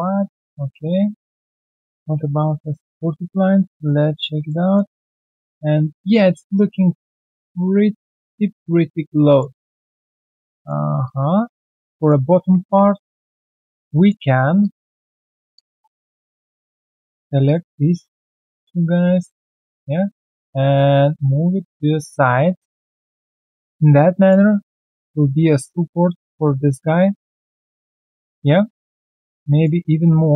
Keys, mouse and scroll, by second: 0.1 right click, 0.7 alt+middle click, 1.5 alt+right click, 2.3 alt+right click, 2.5 alt+middle click, 2.7 alt+right click, 3.0 alt+middle click, 3.6 right click, 4.4 alt+click, 4.6 alt+middle click, 4.8 alt+right click, 5.1 alt+click, 5.6-5.9 alt+scroll down 1, 5.9 alt+middle click, 6.3 alt+right click, 6.5 alt+middle click, 8.5 alt+click, 9.9 alt+middle click, 10.2 alt+right click, 10.5 alt+click, 11.6 alt+scroll down 1, 12.0 alt+click, 12.2 alt+scroll down 1, 12.6 ctrl+1, 13.0 alt+middle click, 13.3 alt+click, 13.8 right click, 15.5 double right click, 16.0 alt+middle click, 17.4 shift+click, 19.1 alt+right click, 21.9 alt+right click, 22.2 alt+middle click, 22.5 alt+right click, 22.7 alt+middle click, 23.0 alt+right click, 23.5 ctrl+1, 23.9 alt+click, 24.4 alt+right click, 24.7 alt+click, 27.1 ctrl+z, 27.6 scroll down 1, 28.5 alt+middle click, 28.8 alt+right click, 29.0 ctrl+1, 29.3 alt+right click, 30.2 alt+middle click.